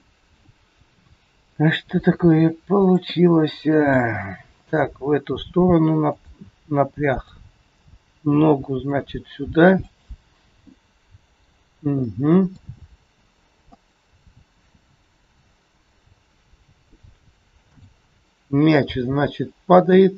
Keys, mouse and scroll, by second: 2.0 r, 3.1 middle click, 4.9 g, 7.6 click, 8.3 g, 10.6 middle click, 11.6 scroll down 2, 12.0 middle click, 12.7 g, 17.6 click, 18.9 g.